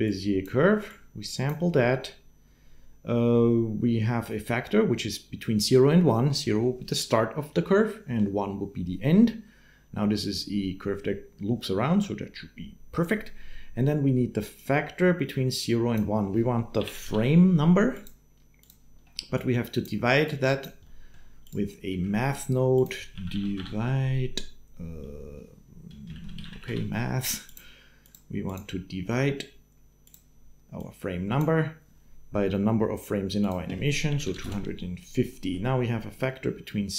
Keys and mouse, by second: 0.7 click, 0.9 click, 14.3-15.7 drag, 20.0 click, 20.9 click, 21.2 click, 21.7 shift+a, 28.3-29.6 drag, 29.9-31.3 drag, 33.4-34.5 drag, 35.1 click.